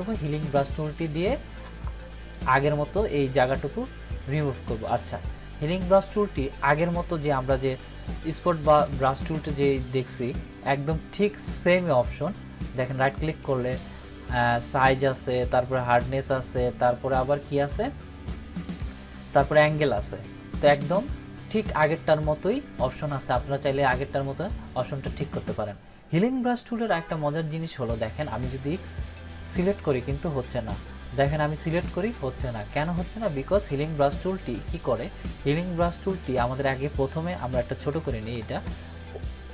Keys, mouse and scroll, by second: 8.0 click, 8.0-9.0 drag, 12.8 right click, 14.6-15.6 drag, 23.0 click, 26.3 click, 29.4 click, 38.1 [, 38.2 [, 38.4 [, 38.5 [.